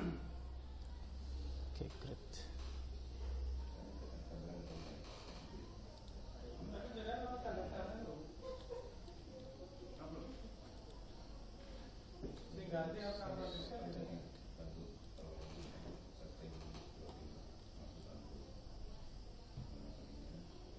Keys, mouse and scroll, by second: 2.5-7.9 middle drag, 7.2 shift+a, 12.6 s, 16.1-20.2 middle drag.